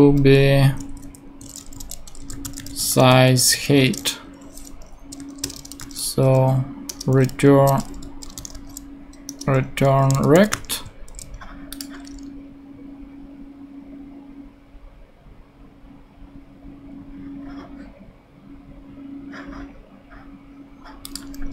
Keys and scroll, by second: 0.6 Right, 1.5 alt+shift+j, 1.7-4.0 typing, 5.2 super+Right, 5.4 super+Return, 5.8 typing, 6.9 Return, 7.8-9.0 typing, 9.3 Return, 10.1 r, 10.8 super+t.